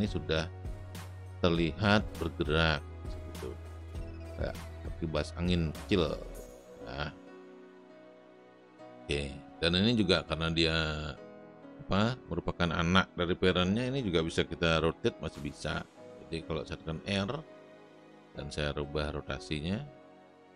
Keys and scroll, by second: 14.8 r.